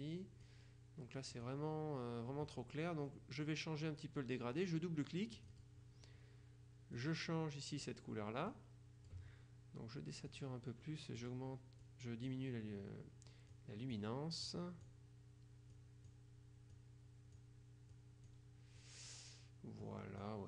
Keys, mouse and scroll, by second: 0.0-1.0 drag, 1.4 click, 5.5 click, 7.0-8.4 drag, 8.6-9.7 drag, 10.4 click, 11.3 click, 12.4 click, 13.6-15.4 drag, 15.8 click, 16.8-18.0 drag, 18.4 click, 19.2 click, 19.9-20.4 drag.